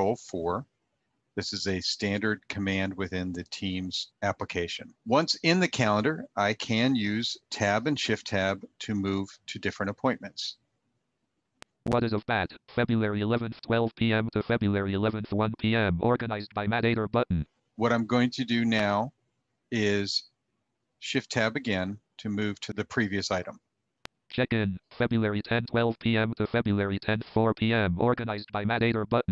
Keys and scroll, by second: 20.4 shift+Tab.